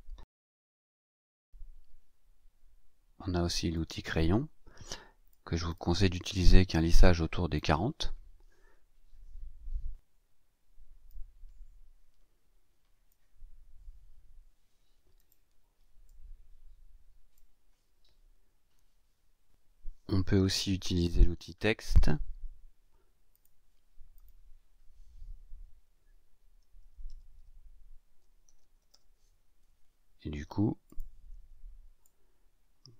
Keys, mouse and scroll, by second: 3.7 click, 5.2-7.7 drag, 9.0-9.9 scroll down 6, 11.0-13.2 drag, 15.1 click, 16.0 click, 21.2-21.9 scroll down 4, 23.3 click, 24.1 click, 26.5-29.3 typing, 30.8 click, 32.0-32.9 ctrl+shift+drag.